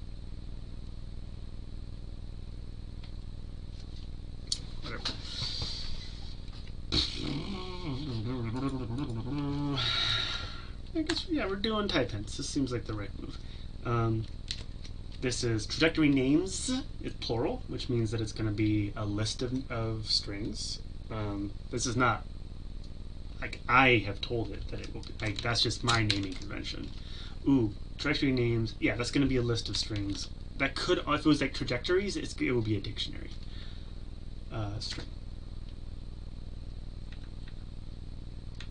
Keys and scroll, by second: 34.9 Tab.